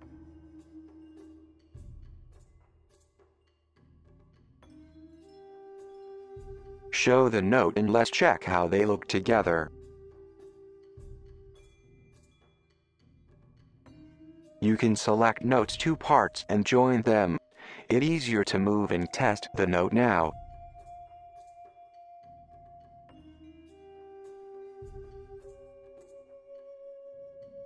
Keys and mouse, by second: 0.7 g, 6.4 click, 6.6 click, 7.6 middle click, 9.1 click, 9.4 click, 11.1 click, 11.3 click, 11.7 click, 12.0 shift+click, 12.5-14.7 right drag, 15.2 j, 15.8-17.3 right drag, 18.5 click, 18.6-21.9 drag, 23.3 g, 24.2 g, 25.5 g, 27.2 middle drag.